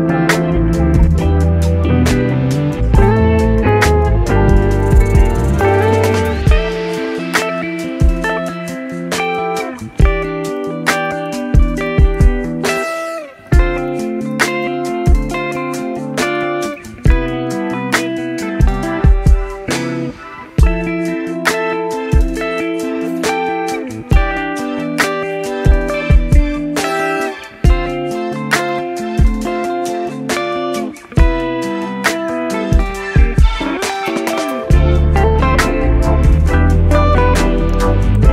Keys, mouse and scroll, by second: 1.3 s, 4.0 a, 5.0-6.3 drag, 6.3 Tab, 7.8 click, 9.9 click, 10.0-12.6 middle drag, 12.7-15.1 right drag, 15.1-17.2 middle drag, 17.2 shift+s, 20.3 right click, 20.7 click, 22.0-25.0 drag, 25.9 click, 28.1 click, 30.2 click, 31.2-32.3 middle drag, 32.3 click, 32.4-35.6 right drag, 35.6 shift+d, 37.8 r.